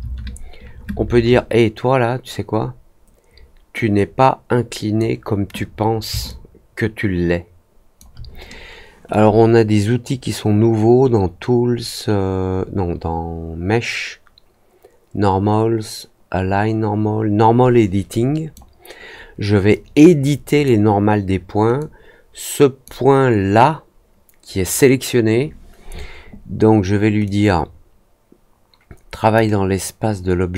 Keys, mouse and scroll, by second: 3.9-4.9 drag, 6.2-7.9 alt+drag, 9.0-18.5 drag, 19.6-20.6 drag, 21.7-22.8 drag, 27.2-29.3 drag.